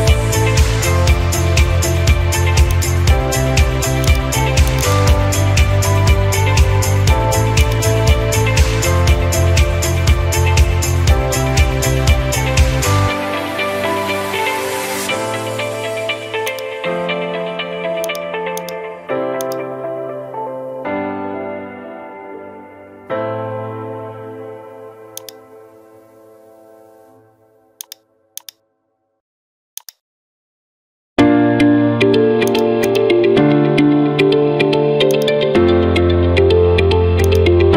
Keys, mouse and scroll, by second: 2.8 click, 4.1 click, 4.8 click, 5.0 click, 5.5-5.9 scroll, 6.1 scroll, 7.7 click, 8.2-8.8 scroll, 9.5 middle click, 11.2 middle click, 11.2-11.9 scroll, 16.6 click, 17.6 click, 18.7 click, 19.5 click, 21.3 middle click, 21.6 scroll down 2, 23.6 middle click, 24.0-24.6 scroll down 1, 25.3 click, 25.7 scroll, 25.7-26.3 scroll down 2, 26.7 scroll, 28.5 click, 29.3 scroll, 30.0 ctrl+click, 30.5-31.4 scroll, 32.6 ctrl+click, 33.2 ctrl+click, 34.0 scroll, 35.2 ctrl+click, 37.3 click.